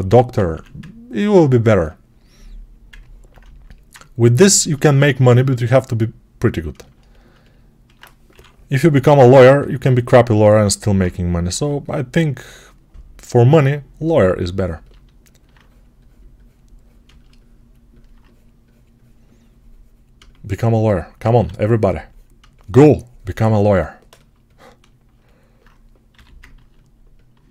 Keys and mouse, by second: 0.4 1, 3.8-9.4 right drag, 8.2 6, 9.4-13.9 alt+shift+drag, 11.4 3, 13.9-20.0 ctrl+alt+right drag, 20.0-23.5 shift+drag, 21.2 1, 23.5-26.4 alt+right drag, 26.0 g, 26.4-27.5 drag.